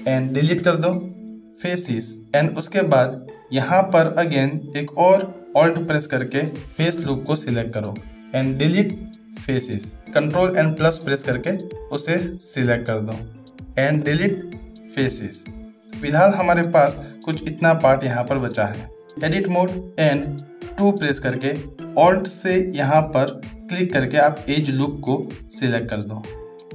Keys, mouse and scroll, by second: 0.5 Delete, 2.3 shift+middle click, 5.9 alt+click, 8.7 Delete, 10.0 ctrl+KP_Add, 13.9 Delete, 17.0 shift+middle click, 19.3 Tab, 19.9 Tab, 20.5 2.